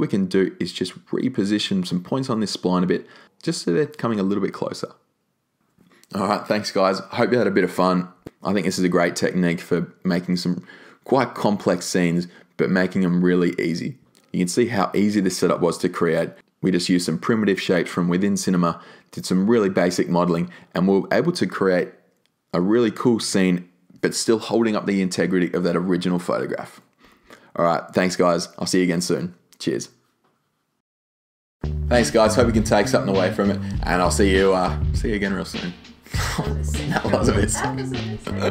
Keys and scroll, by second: 16.1 e.